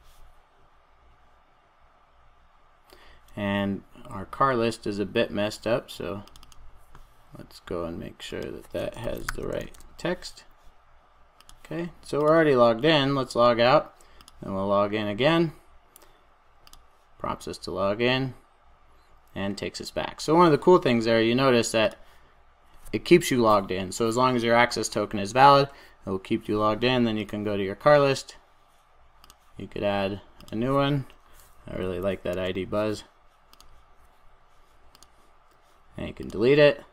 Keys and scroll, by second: 9.8 super+s.